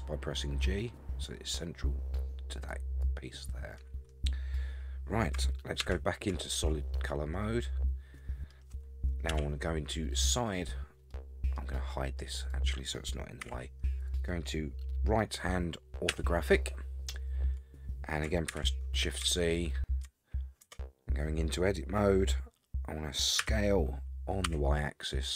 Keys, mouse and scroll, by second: 5.8 shift+z, 6.6-8.5 middle drag, 9.3 KP_3, 11.1-11.6 middle drag, 12.4 click, 13.4 h, 14.0 click, 16.1 KP_3, 17.3-18.2 scroll up 3, 18.5 shift+z, 19.4-20.0 shift+middle drag, 20.6 Tab, 23.4 s.